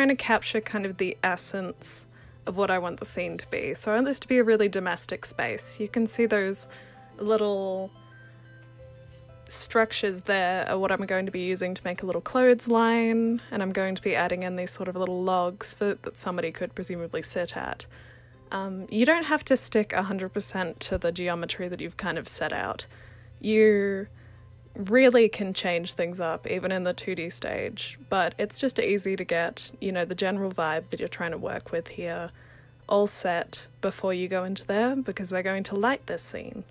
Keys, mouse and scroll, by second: 0.1 alt+click, 0.7 alt+click, 1.4 alt+click, 1.7 w, 2.0 alt+click, 2.1 right click, 2.4 alt+click, 2.8 alt+click, 3.2 alt+click, 3.7 alt+click, 4.2 ctrl+c, 4.4-6.5 typing, 4.5 click, 4.9 alt+click, 5.9 alt+click, 6.6 alt+click, 7.4 alt+click, 7.7 e, 8.2 alt+click, 8.8 ctrl+c, 9.0 w, 9.2 click, 9.5 e, 10.0 alt+click, 10.9 w, 11.0 click, 11.3 alt+click, 11.5 r, 11.6 click, 12.0 alt+click, 13.9 click, 14.5 w, 14.9 click, 15.0 f, 15.2 alt+right click, 15.5 r, 15.8 click, 16.7 click, 17.0 w, 17.4 click, 17.6 alt+click, 18.0 alt+click, 18.5 ctrl+c, 18.5 ctrl+v, 18.8 alt+click, 19.3 r, 19.5 click, 19.7 alt+click, 19.9 w, 20.1 alt+drag, 20.4 ctrl+c, 20.7 alt+click, 20.9 click, 21.3 alt+click, 22.2 alt+click, 22.3 alt+right click, 22.5 alt+drag, 22.6 alt+middle click, 22.9 ctrl+c, 23.1 w, 23.2 click, 23.7 alt+click, 24.0 ctrl+c, 24.2 alt+click, 24.7 alt+click, 24.9 ctrl+v, 25.6 alt+click, 26.4-26.8 alt+drag, 27.1 ctrl+c, 27.3 r, 27.4 click, 27.8 w, 28.1 alt+click, 28.5-28.8 alt+drag, 29.1 alt+click, 29.2 ctrl+d, 29.7 alt+click, 30.4 ctrl+c, 31.0 click, 31.2 alt+click, 31.4 ctrl+c, 31.4 ctrl+v, 31.7 alt+click, 31.8 w, 32.6 alt+drag, 32.9 alt+click, 33.3 alt+click, 33.7 alt+click, 34.0-34.4 alt+drag, 34.8 ctrl+v, 35.0 click, 35.1 click, 35.5 ctrl+d, 35.7 ctrl+d, 36.5-36.7 alt+drag.